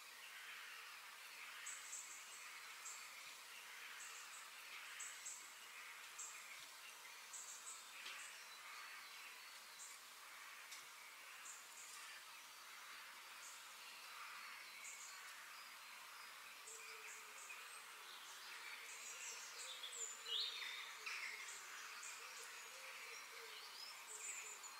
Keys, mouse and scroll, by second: 1.1-3.0 middle drag, 4.1 g, 6.5 middle click, 7.1 KP_3, 8.9-10.0 middle drag, 11.2 click, 11.6-12.6 middle drag, 13.1 click, 13.6-14.4 scroll down 3, 14.4-15.6 middle drag, 15.6 click, 16.1 shift+click, 16.5 shift+click, 17.4 shift+click, 18.5 g, 22.0 click, 22.9 click, 23.8 KP_3, 24.4 g.